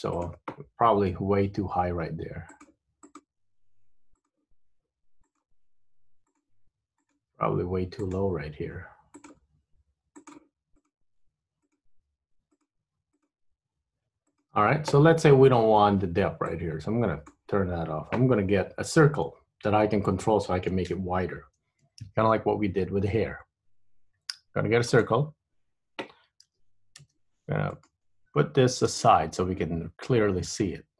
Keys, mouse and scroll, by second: 0.2 click, 1.3 g, 3.2 click, 3.3 g, 5.3 click, 5.6 g, 7.1 click, 7.3 g, 9.3 click, 9.5 g, 10.9 click, 11.2 g, 11.8 click, 12.1 g, 13.3 click, 13.5 g, 16.6 click, 18.8 Tab, 19.4-20.5 scroll down 3, 22.2 shift+a, 26.5 g, 29.0 g.